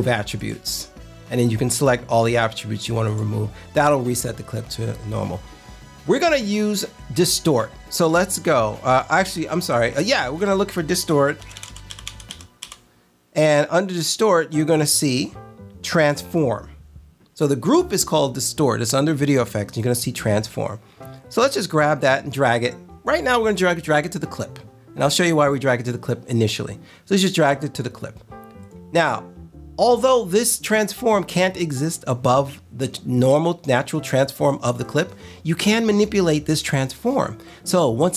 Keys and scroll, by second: 11.0-13.0 typing.